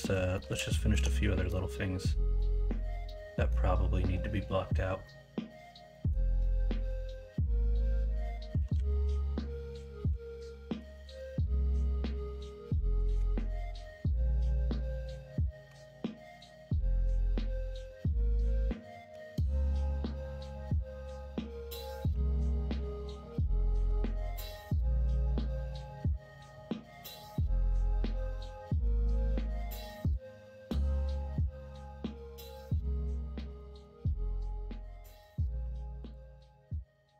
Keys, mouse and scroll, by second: 0.4 middle click, 0.7 shift+middle drag, 1.4-2.3 middle drag, 3.0-3.4 middle drag, 5.0 middle click, 5.9 middle click, 6.4-7.1 middle drag, 7.7 middle click, 8.5 KP_1, 8.7 KP_3, 11.0 shift+a, 15.6 Tab, 22.1 r, 24.2 alt+z, 26.9 s, 29.1 shift+middle click, 33.5 shift+middle click, 35.6 ctrl+r.